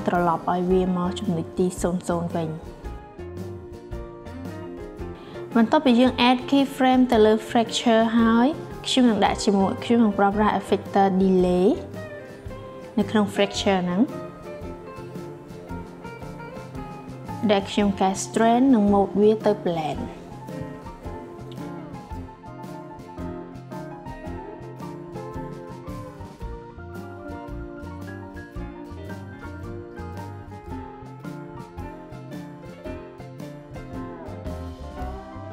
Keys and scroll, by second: 21.5 7, 21.9 0.